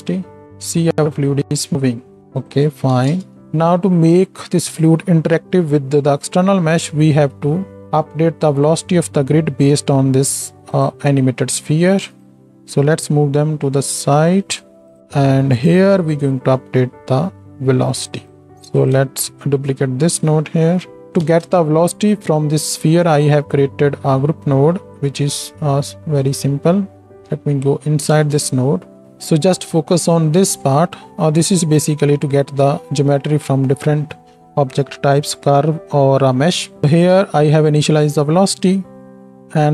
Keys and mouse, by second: 3.4 shift+Left, 12.5 g, 18.1 click, 18.1 middle click, 18.7 click, 18.7 middle click, 19.5 shift+d, 21.3 ctrl+space, 23.0-26.3 shift+drag, 23.1 shift+a, 26.3-39.7 right drag, 27.3 Tab, 28.1 ctrl+space.